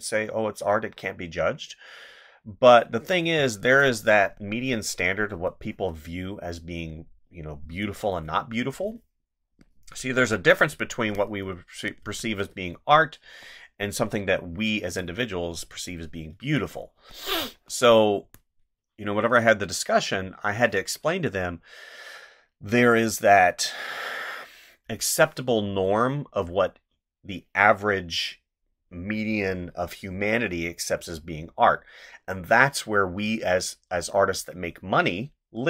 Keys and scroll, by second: 3.2 space, 5.3 space, 7.7 space, 11.0 space, 14.9 ctrl+z, 16.3 space.